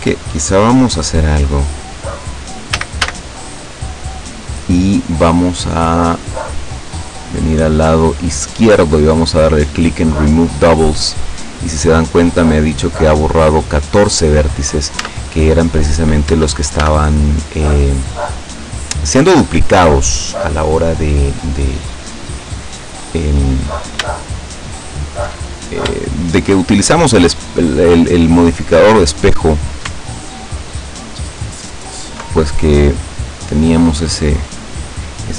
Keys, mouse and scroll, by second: 0.1 middle click, 0.6 middle click, 1.6 middle click, 2.8 a, 7.0-9.1 drag, 10.4 click, 15.1 Tab, 16.4 Tab, 16.9 a, 17.9-21.9 drag, 22.4-22.7 scroll up 2, 24.5 alt+shift+right click, 26.6 shift+right click, 27.9 shift+right click, 28.8 shift+right click, 29.4 shift+right click, 30.2 alt+shift+right click, 30.8 alt+shift+right click, 31.8 alt+shift+right click, 32.4 alt+shift+right click, 33.6 shift+right click, 34.3 shift+right click.